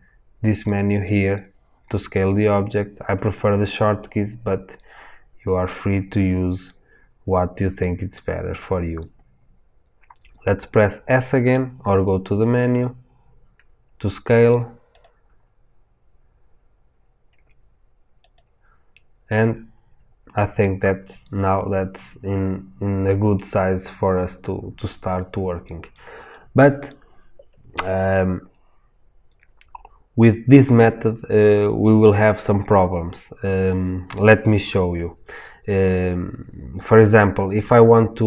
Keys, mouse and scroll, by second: 11.1 s, 14.8 click, 15.3 scroll down 1, 17.3 s, 19.0-38.2 middle drag, 23.7 scroll up 1, 24.7-26.3 scroll up 1.